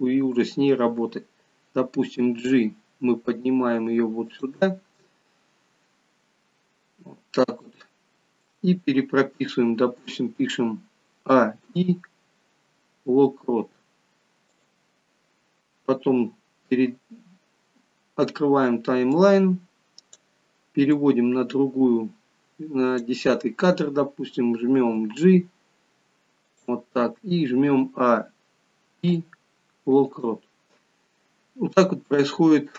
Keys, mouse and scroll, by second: 2.1 g, 6.4 scroll up 2, 6.9 scroll down 1, 7.8 shift+middle click, 11.4 a, 11.7 i, 19.0 click, 20.9 click, 24.9 g, 28.0-29.0 a, 29.0 i.